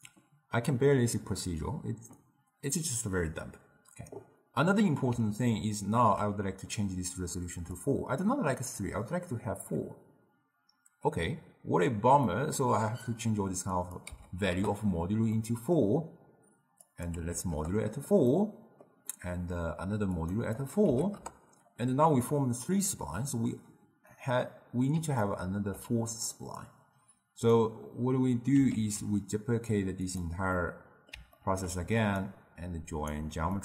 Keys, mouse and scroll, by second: 4.7-7.7 middle drag, 7.7-10.8 drag, 12.4-13.9 middle drag, 13.9-15.5 drag, 15.5-17.0 middle drag, 17.0-18.4 drag, 18.4-20.3 middle drag, 20.3 click, 20.7-23.7 drag, 24.7-26.7 middle drag, 26.7-28.9 drag, 28.9 ctrl+shift+d, 30.7-32.3 middle drag, 32.3-33.6 alt+right drag.